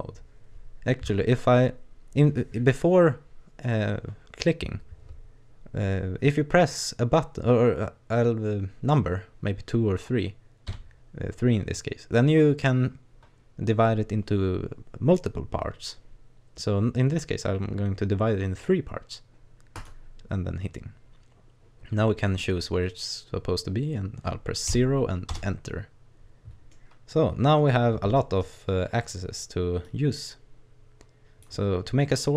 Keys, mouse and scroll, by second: 26.3-26.7 scroll up 1, 26.7 middle click, 27.9-28.2 scroll down 1, 28.2 middle click, 29.1 right click, 29.3 scroll down 1, 29.8 click, 31.7-32.2 scroll down 2.